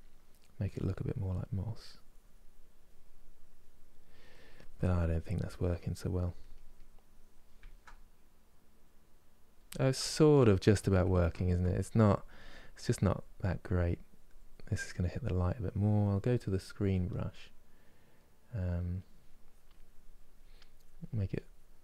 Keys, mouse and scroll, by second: 7.3-11.4 ctrl+middle drag, 11.4-16.2 drag, 16.2-18.7 middle drag, 18.7-21.8 drag.